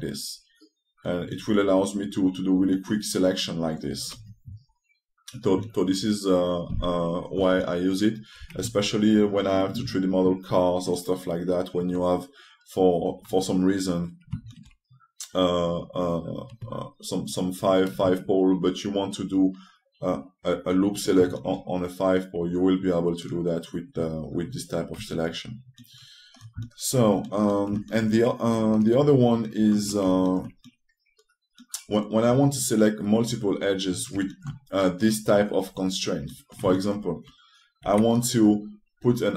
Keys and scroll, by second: 38.5 2.